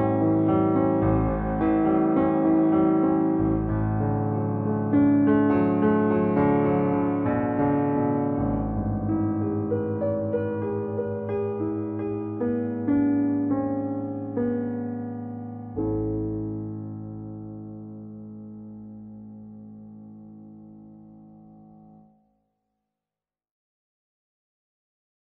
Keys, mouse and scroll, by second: 1.0-1.7 scroll down 1, 1.7-10.0 middle drag.